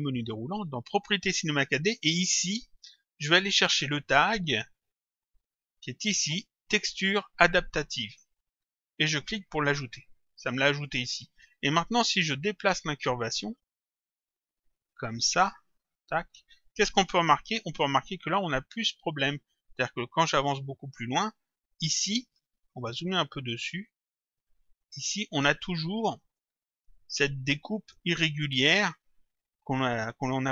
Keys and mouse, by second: 9.1 click, 12.5 click, 14.3 click, 21.3 click, 23.0 click, 24.3 click, 25.8 click.